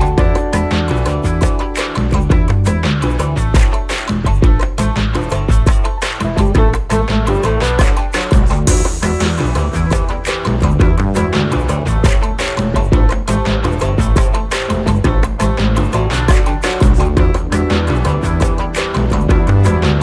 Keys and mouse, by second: 7.9 click, 9.1 shift+click, 11.8-14.4 drag, 17.2-19.1 drag.